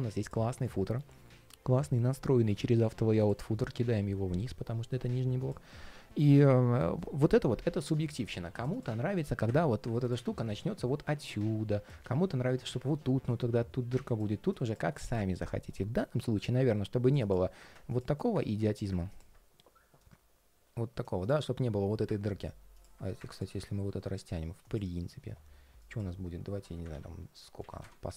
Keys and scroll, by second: 11.7 super+z, 26.6 super+a.